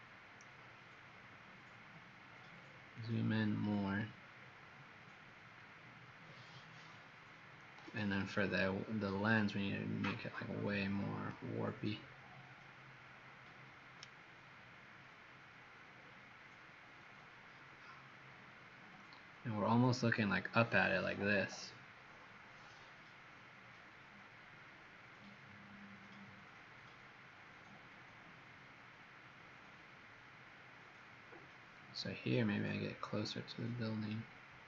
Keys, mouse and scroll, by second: 2.3-2.9 scroll up 9, 3.5-5.0 scroll down 6, 5.0 middle click, 7.9 w, 8.3 click, 12.0 middle click, 15.1 shift+middle click, 29.8 middle click, 32.2-32.5 scroll up 4, 32.8-33.6 scroll up 3, 33.7 scroll down 2, 34.4 middle click.